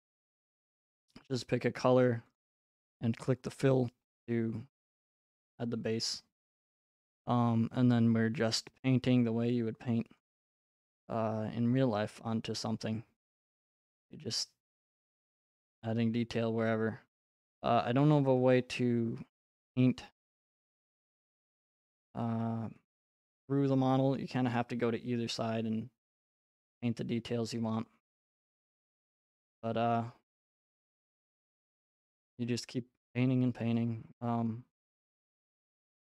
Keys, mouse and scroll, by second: 1.3 click, 2.4 click, 4.1-5.5 scroll, 5.6-6.4 scroll, 6.4 right click, 10.2 click, 11.1 click, 11.8-12.9 scroll, 12.9 scroll, 18.1 click, 20.8 right click, 21.5 click, 21.9 click, 24.2 right click, 29.0 click, 30.1 right click, 33.8 click, 34.8 middle click, 35.4 middle click, 35.4 middle click.